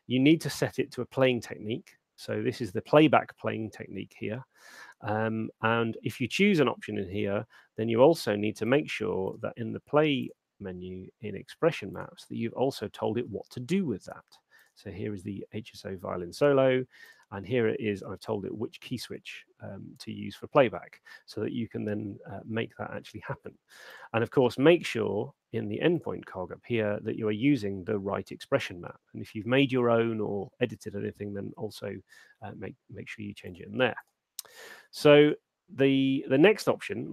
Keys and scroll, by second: 7.3 Escape, 23.6 Escape.